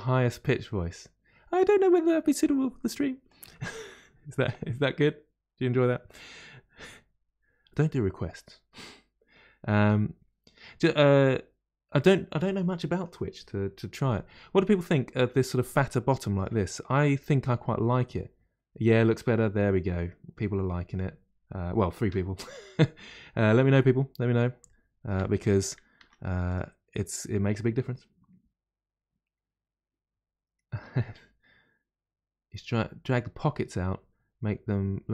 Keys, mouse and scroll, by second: 6.3-9.4 middle drag, 15.8-18.9 middle drag, 24.6-25.9 shift+middle drag, 25.9 Tab, 26.5 click.